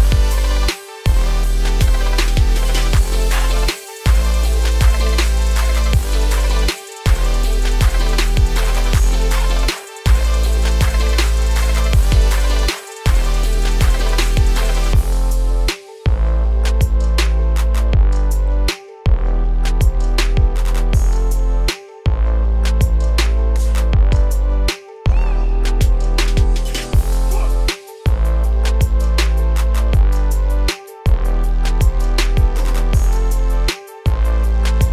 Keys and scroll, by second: 1.4 ctrl+space, 32.3 ctrl+z.